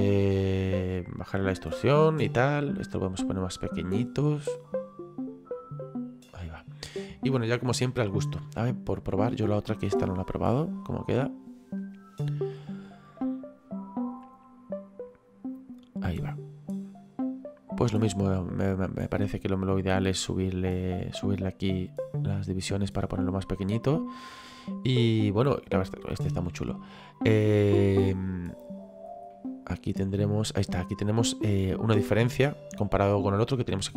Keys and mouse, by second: 0.0 click, 2.8 click, 9.0 click, 18.4 click, 23.7 middle click, 26.5 middle click, 29.3 middle click.